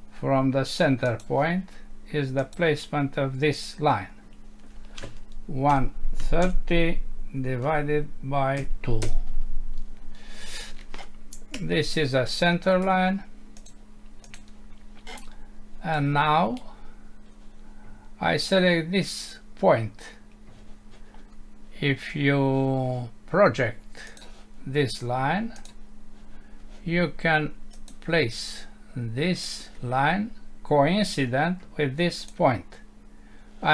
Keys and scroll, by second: 9.0 Return, 11.5 Escape.